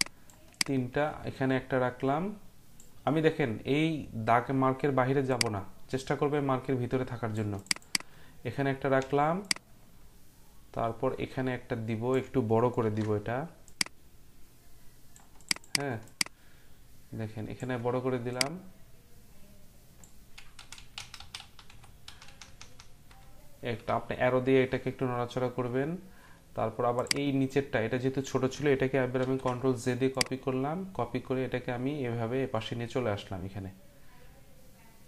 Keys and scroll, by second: 12.8 ctrl+t, 20.6 Right, 20.8-23.7 typing, 29.2 ctrl+j.